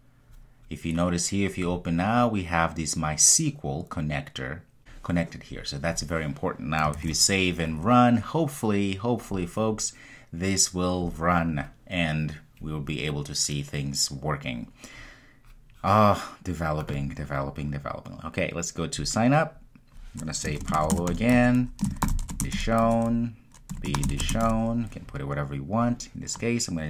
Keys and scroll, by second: 7.0 super+s, 9.3 super+F2.